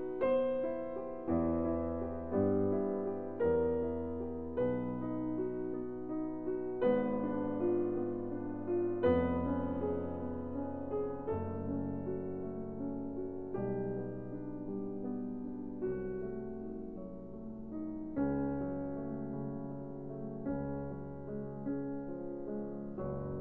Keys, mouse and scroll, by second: 0.1 click, 0.2 click, 1.9 scroll, 4.0-4.4 scroll, 4.9 ctrl+scroll, 5.6 scroll, 8.1 click, 9.0 right click, 10.1 click, 11.3-12.9 scroll, 14.5 click, 15.2 middle click, 15.2-15.6 scroll, 15.9 s, 17.9 click, 20.2 click, 20.8-21.1 scroll, 23.3 click.